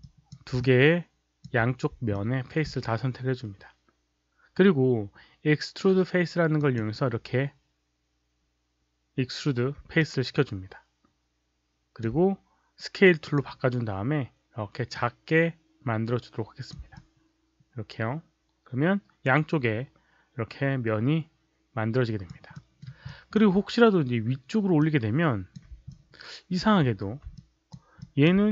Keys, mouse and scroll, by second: 0.5-1.3 alt+drag, 2.0-2.6 alt+drag, 5.0 alt+click, 5.0 right click, 6.5 click, 9.9-11.9 alt+drag, 13.1 click, 14.8-16.6 drag, 16.9-22.2 alt+drag, 22.5 alt+middle click, 23.0 alt+click, 24.7-25.5 drag, 25.9-26.5 alt+drag, 26.7 z, 27.3-27.6 alt+drag, 27.9 alt+click.